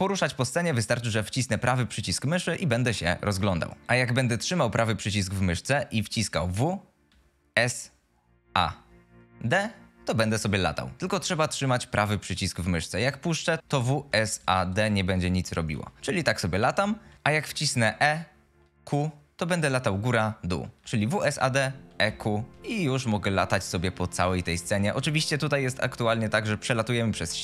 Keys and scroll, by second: 6.6 w, 7.5 s, 8.4 a, 9.4 d, 13.2-21.5 typing, 24.9 a, 25.6 d, 26.3 w.